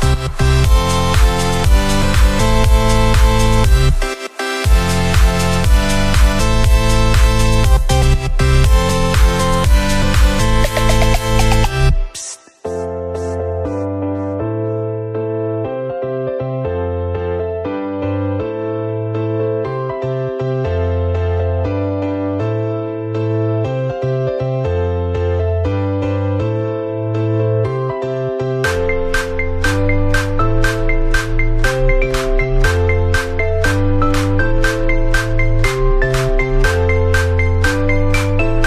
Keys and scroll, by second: 18.2 ctrl+-, 35.3 2, 35.7 0.